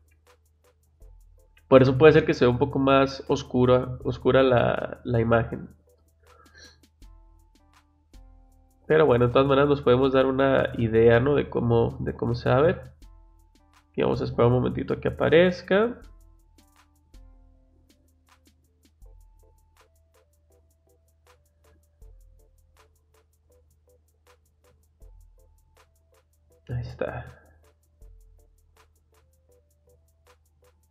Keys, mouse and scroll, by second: 0.0 click, 9.2 click, 29.5 click.